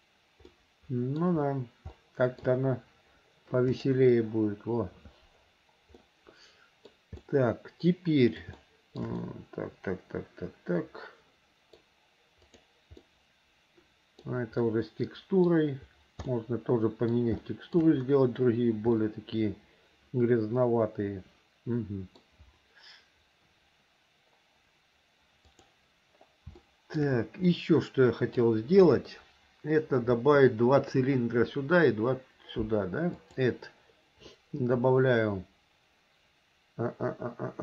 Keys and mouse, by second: 0.7 middle click, 2.1 shift+middle click, 2.2 shift+click, 6.2 middle click, 7.4-8.6 middle drag, 8.7 shift+middle click, 9.4-12.0 middle drag, 12.6 click, 13.2-14.4 middle drag, 14.8 middle click, 16.4 middle click, 17.6 shift+middle click, 19.1-22.4 middle drag, 25.6 click, 26.8 shift+middle click, 27.6 middle click, 33.3-37.6 drag.